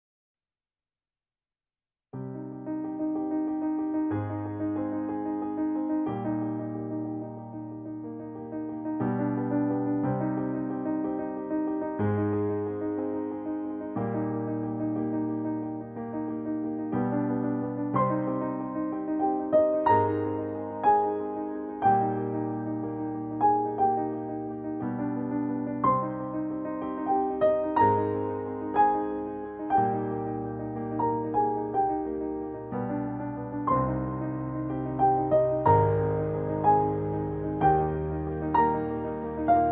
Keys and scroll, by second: 5.0 ctrl+t.